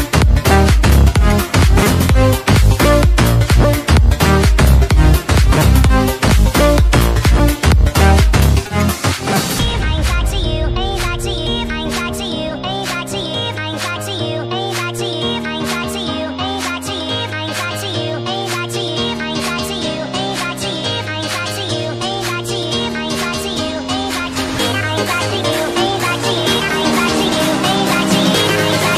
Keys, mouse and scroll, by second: 0.0-0.6 typing, 0.9 click, 5.4 click, 5.5 Return, 7.3 click, 7.7 ctrl+a, 8.1 click, 10.5 click, 10.9 BackSpace, 11.3 click, 11.4 Return, 11.9 click, 13.1 click, 14.4 Return, 15.1 click, 18.0 click, 19.5 click, 20.7 alt+Tab, 21.3 click, 22.4 ctrl+c, 22.5 alt+Tab, 23.0 click, 23.9 ctrl+v, 24.6 Left, 25.2 Left, 25.8 Right, 26.2 Left, 26.8 shift+a, 27.2 click, 27.6 click.